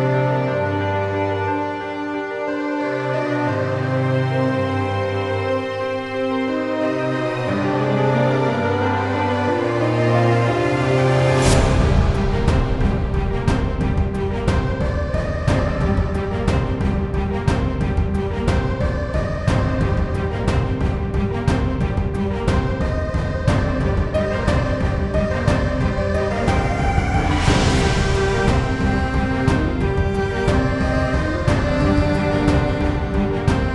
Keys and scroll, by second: 0.1 Return, 3.8-13.4 typing, 13.4 Return, 16.1-16.9 typing, 21.1-23.7 typing, 23.9 Delete, 24.1 Return.